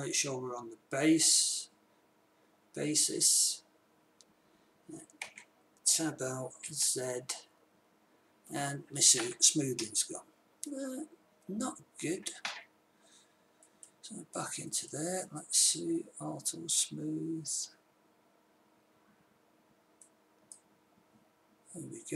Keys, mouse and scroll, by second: 5.6 Tab, 7.1 z, 12.5-14.0 middle drag, 20.3-22.1 drag.